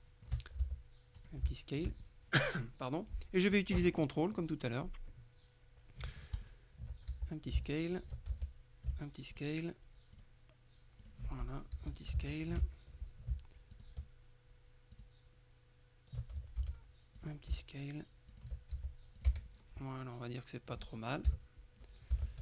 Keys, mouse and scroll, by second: 0.0 shift+middle click, 0.7 shift+s, 1.2 shift+click, 1.6 shift+middle click, 2.0-5.7 shift+scroll down 3, 5.7-6.2 scroll down 1, 6.5 ctrl+click, 7.2 ctrl+s, 7.6-8.6 ctrl+drag, 8.4 ctrl+s, 9.0-10.0 ctrl+drag, 10.2 click, 11.1 click, 11.8 s, 12.0-13.1 shift+drag, 13.8 click, 15.0 click, 16.7 s, 17.2 click, 18.4 ctrl+click, 18.8 ctrl+s, 19.2 ctrl+click, 19.4 ctrl+Tab, 19.9 ctrl+middle click, 21.4 KP_3, 22.2 Tab.